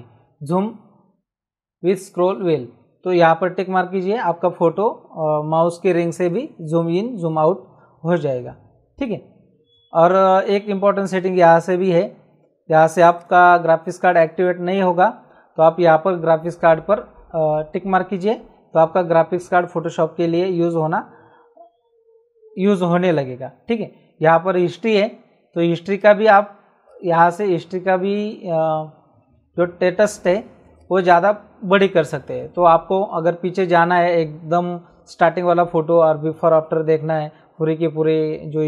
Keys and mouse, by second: 10.4 click, 13.1 click, 25.9 click, 30.7 click.